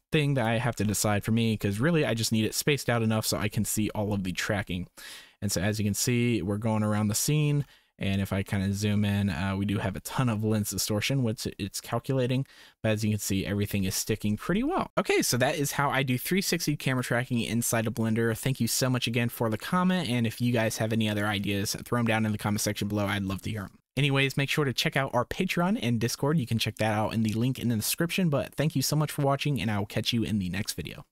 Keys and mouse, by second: 1.8-3.2 drag, 3.4 space, 9.0 middle click, 10.6 middle click, 11.5 middle drag, 14.5 shift+click.